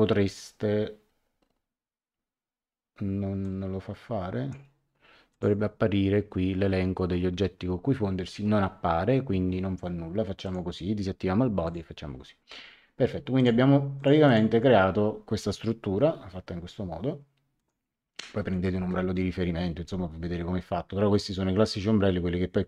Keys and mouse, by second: 3.4 click, 5.3 click, 10.4 click, 11.6 click, 13.3 click, 17.5 click.